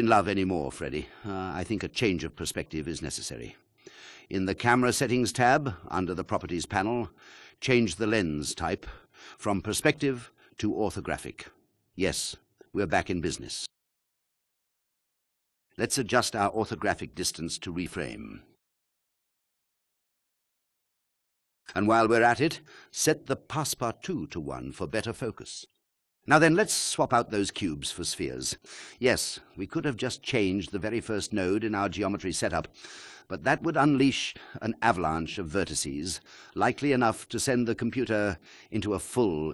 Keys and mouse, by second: 8.2-11.1 drag, 15.6 g, 15.6 y, 17.2-21.9 drag, 24.2 click, 25.1-25.8 drag, 28.9 space, 30.3 click.